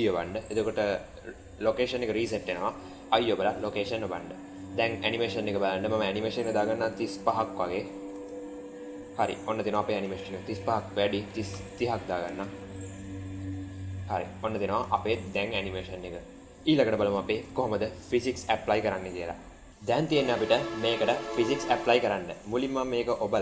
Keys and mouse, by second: 2.7 i, 4.5 click, 5.9-7.6 drag, 8.0 space, 9.6 space, 10.4-11.9 drag, 12.1 space, 14.7 space, 15.7 click, 20.4 n, 22.3 click, 23.3-23.4 shift+middle drag.